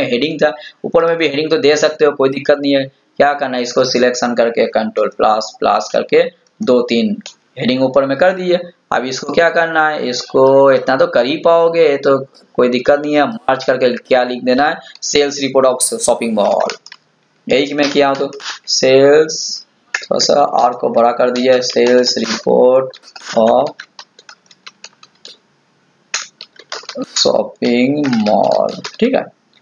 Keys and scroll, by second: 4.8 ctrl++.